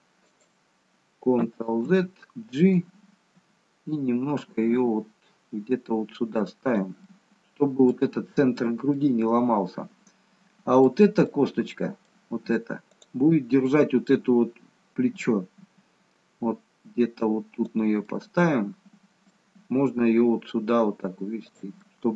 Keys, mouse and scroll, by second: 1.9 ctrl+z, 3.3 g, 7.1 middle click, 8.9 middle click, 13.0 click, 15.7 g, 18.2 middle click, 19.7 g, 21.9 middle click.